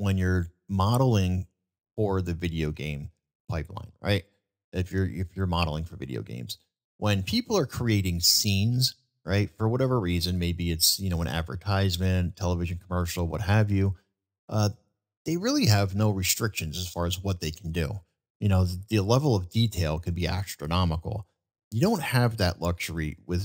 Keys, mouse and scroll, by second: 0.3-0.7 middle drag, 3.9-4.5 middle drag, 5.7-6.3 middle drag, 10.1-10.5 middle drag, 11.8-12.2 middle drag, 14.1-14.5 middle drag, 15.1-15.5 middle drag.